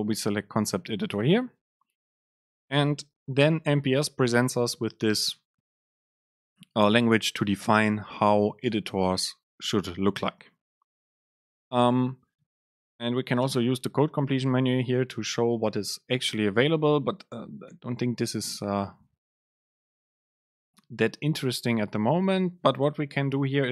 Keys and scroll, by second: 13.6 super+space, 21.4 super+space.